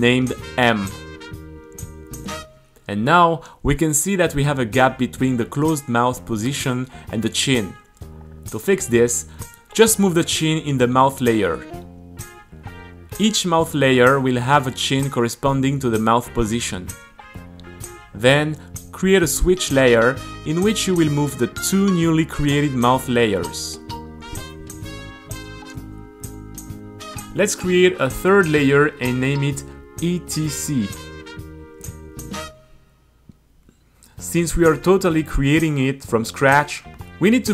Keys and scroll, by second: 0.9-1.9 typing, 3.4 space, 3.5 Return, 4.4 super+a, 4.5 t, 5.2 super+r, 6.1-8.2 typing, 9.2 super+r, 10.3 t, 11.5 super+r, 15.6 g, 16.0 super+x, 16.6 t, 17.3 super+r, 19.6 super+v, 20.7 shift+m, 28.1 shift+e, 28.3 Return, 28.4 a, 29.0 space, 29.3 t, 30.9-35.3 typing.